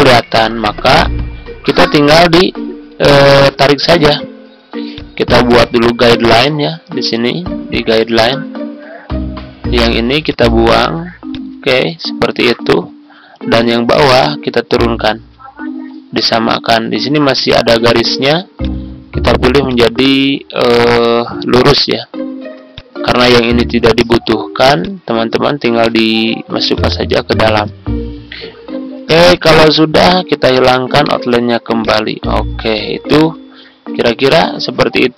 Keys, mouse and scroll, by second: 3.0-3.5 ctrl+scroll up 2, 4.9-11.2 drag, 12.2 ctrl+scroll down 1, 13.5-16.8 drag, 16.9-17.3 ctrl+scroll up 1, 17.8 click, 20.4 ctrl+scroll down 1, 22.4 ctrl+z, 22.7 click, 27.7 ctrl+scroll down 1, 29.2 click, 30.9 right click, 31.8 click, 33.4 ctrl+scroll down 1, 34.9 ctrl+scroll down 1.